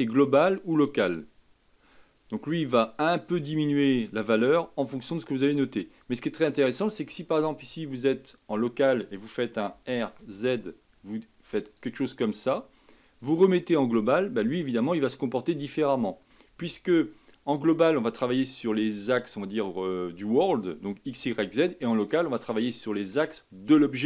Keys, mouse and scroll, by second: 6.7-9.7 middle drag, 9.7 r, 13.0-14.6 drag, 14.6-18.9 middle drag.